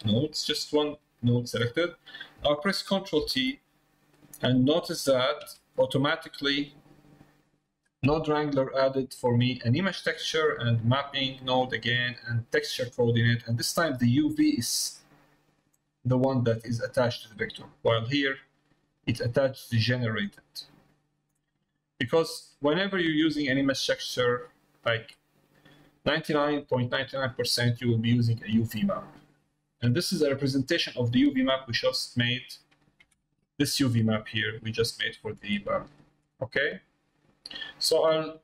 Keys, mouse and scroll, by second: 0.0 click, 0.4 middle click, 1.2 click, 4.3 middle click, 6.9 middle click, 17.3 middle click, 17.9 middle click, 18.4 middle click, 21.5 middle click, 22.2 middle click, 23.0 middle click, 24.6 middle click, 26.8 middle click, 32.6 click, 36.5 middle click, 37.7 middle click.